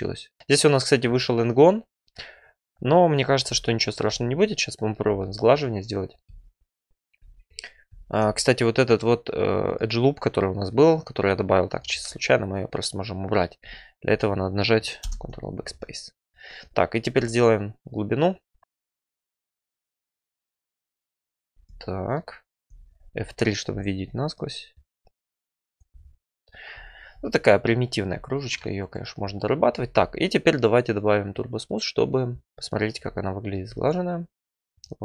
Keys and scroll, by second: 5.0 4, 9.3 2, 15.0 ctrl+BackSpace, 17.0 4, 19.2 alt+e, 20.2 e, 23.1 F3, 27.5 `, 28.1 F3.